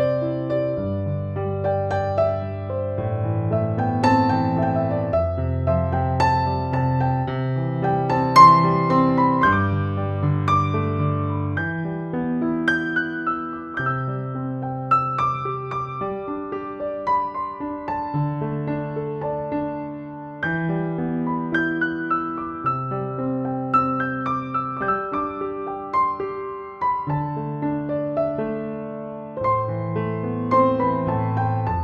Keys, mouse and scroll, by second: 0.2 space, 0.7-1.9 drag, 3.7 space, 3.7-4.3 click, 4.1 space, 4.6-6.5 drag, 6.5 space, 6.6-7.3 click, 7.0 space, 7.3-8.9 drag, 9.9 ctrl+-, 11.7-15.2 typing, 11.9 click, 12.8 click, 13.5 ctrl+=, 15.6-17.8 drag, 18.7 [, 19.0 [, 19.2 click, 19.7 ], 20.4 click, 21.5 space, 21.6-22.2 click, 22.0 space, 22.9-25.1 drag, 25.7 space, 25.8 click, 26.2 space, 26.5 click, 27.1 space, 27.2-28.1 click, 27.6 space, 27.8 click, 28.7 ctrl+z, 29.1 space, 29.2-29.8 click, 30.1 ctrl+-, 31.0 ctrl+=, 31.6 space, 31.7-31.8 click.